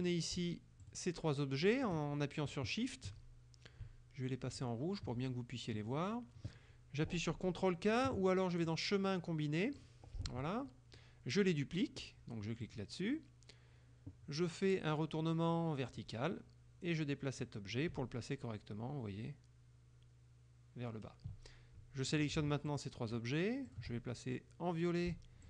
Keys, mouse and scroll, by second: 0.1 click, 0.9 shift+click, 1.9 shift+click, 4.6 shift+click, 8.8 click, 9.9 click, 10.7 click, 12.7 click, 15.9 click, 17.4-21.3 drag, 22.2 click, 22.7 shift+click, 23.7 shift+click.